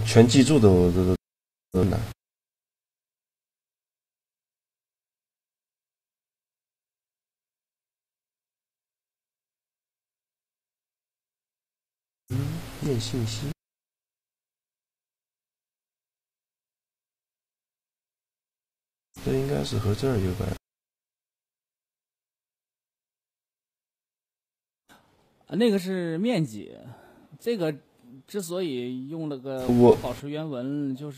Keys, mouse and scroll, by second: 2.5-5.0 drag, 4.7 right click, 9.9-11.9 drag, 12.3-15.1 drag, 14.4 right click, 26.8-28.9 middle drag.